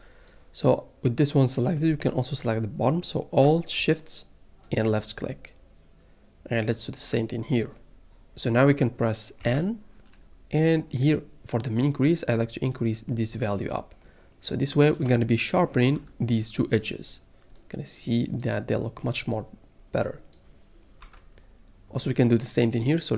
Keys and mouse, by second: 7.1 alt+shift+click, 9.4 n, 12.9-14.9 drag, 15.9 Tab, 17.3-18.0 middle drag, 21.0 Tab.